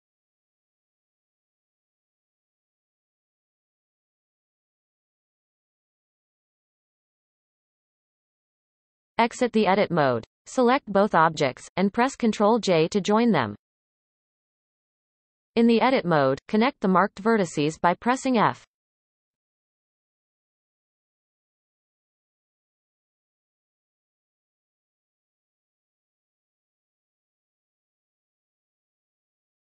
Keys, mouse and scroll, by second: 0.2 click, 0.6 shift+click, 1.0 x, 2.4 click, 2.8 shift+click, 3.6 f, 4.0 click, 4.4 shift+drag, 5.2 f, 5.6-6.3 scroll down 3, 7.6-8.3 scroll down 7, 8.7-9.5 shift+middle drag, 9.5 Tab, 10.8 a, 13.6 ctrl+j, 16.4 Tab, 16.8-17.4 scroll up 1, 17.4 shift+middle click, 17.8-18.5 scroll up 5, 18.5-18.9 shift+middle drag, 18.9-19.3 scroll up 1, 20.0 click, 20.5-21.1 scroll down 4, 21.1 shift+middle click, 21.6-22.2 scroll up 6, 22.2 shift+middle click, 23.5 shift+click, 24.4 f, 24.6-25.4 scroll down 6, 25.4 shift+middle click, 25.6 scroll down 1, 25.8-26.2 scroll up 1, 26.2 shift+middle click, 26.6-27.7 scroll up 3, 27.7 click, 28.1-28.9 scroll down 10, 28.9 shift+middle click, 29.4-29.6 scroll up 6.